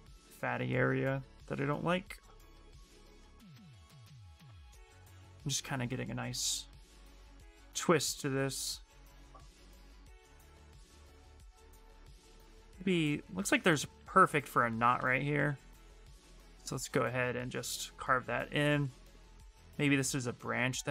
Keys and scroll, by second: 5.9 b, 13.9 s, 14.8 s, 16.1 s.